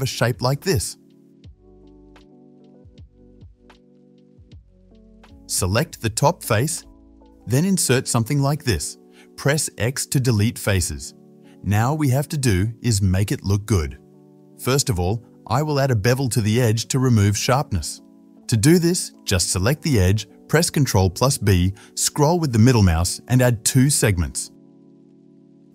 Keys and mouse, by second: 2.3 shift+middle click, 3.0 alt+shift+click, 3.3-6.4 middle drag, 3.5 click, 3.5 right click, 6.4-21.3 drag, 7.4 i, 9.6 x, 16.2-18.3 middle drag, 16.2-18.3 right drag, 18.9 alt+shift+middle click, 18.9 alt+shift+right click, 19.7 alt+shift+middle click, 19.7 alt+shift+right click, 21.3-25.3 shift+middle drag.